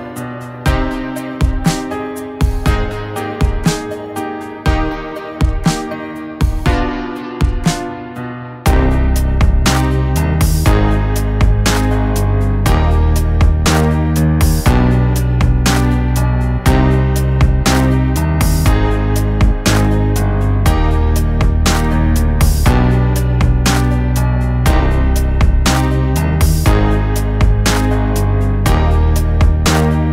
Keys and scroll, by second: 1.6 Tab, 10.7 a, 16.5 g, 21.9 g, 24.9 g, 29.4 g.